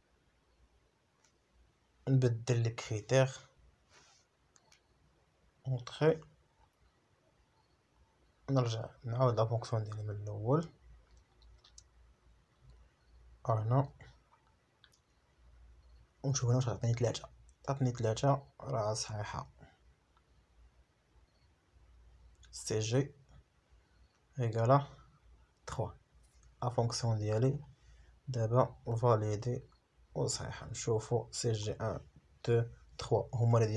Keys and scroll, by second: 2.5 F4, 6.3 F4, 8.3 F4, 10.6 F4, 15.9 F4, 18.5 F4, 21.0 Return, 23.3 Escape, 29.6 BackSpace, 30.0 shift+a, 30.8 Return.